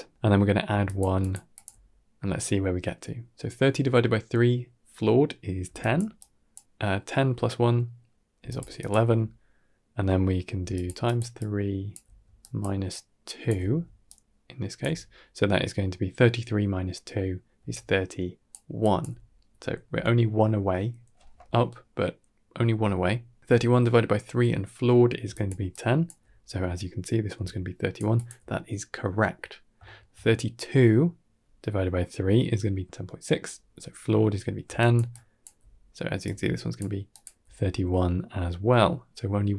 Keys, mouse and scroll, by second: 0.5-1.5 typing, 0.7 click, 1.1 click, 1.4 click, 5.5 d, 5.6 click, 6.0 d, 6.2 click, 6.4 d, 6.5 d, 8.2 d, 8.3 click, 8.6 click, 8.8 d, 8.9 d, 10.4-14.7 typing, 10.6 click, 10.9 click, 11.2 click, 12.3 click, 12.8 click, 13.9 click, 17.4-18.9 typing, 17.6 click, 18.7 click, 25.1 d, 25.2 click, 25.6 click, 25.9 d, 26.0 d, 27.2-28.2 typing, 27.3 click, 28.0 click, 29.7 shift+middle click, 34.5-37.3 typing, 34.6 click, 35.0 click, 36.1 click, 37.0 click.